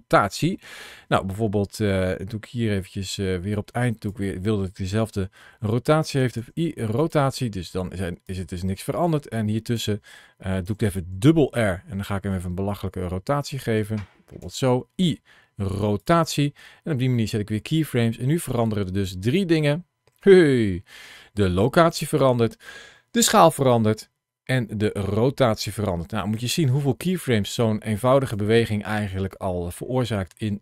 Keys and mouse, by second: 3.3 click, 6.2 i, 8.1-9.6 drag, 10.5 r, 13.3 click, 14.2 i, 17.1-18.3 drag, 18.3 space, 20.9 space, 21.5-26.2 drag, 27.4 click, 29.8-30.6 drag.